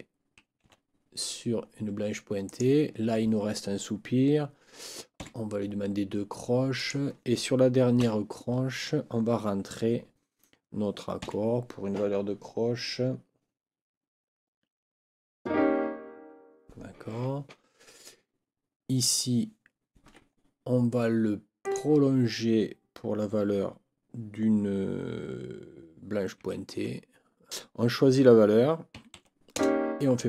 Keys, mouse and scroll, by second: 0.6 ., 2.4 click, 5.2 KP_4, 6.7 click, 8.0 n, 11.2 4, 20.0 Escape, 21.6 click, 26.4 KP_6, 26.7 KP_Decimal, 28.9 6, 29.1 KP_Decimal, 29.5 KP_Add.